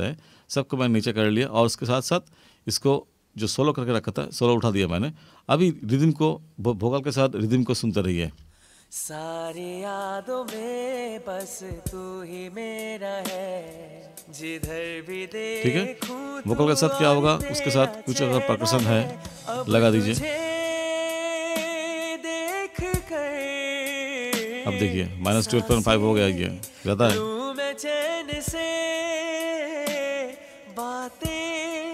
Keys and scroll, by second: 8.4 space.